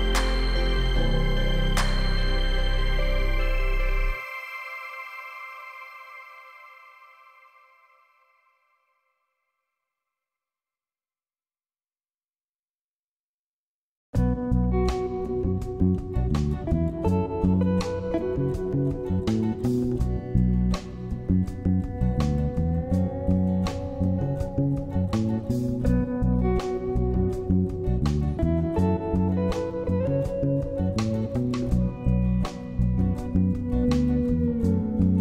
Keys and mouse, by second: 0.5-1.0 shift+drag, 2.9 ctrl+r, 6.4 ctrl+r, 11.0 ctrl+r, 13.5 ctrl+r, 17.3 click, 18.4 Tab, 19.4 click, 22.3 middle click, 26.4 middle click, 27.7 Tab, 28.8 click, 29.8 ctrl+click, 32.9 click, 33.4 middle click, 34.0-34.4 shift+middle drag, 34.7-35.2 middle drag.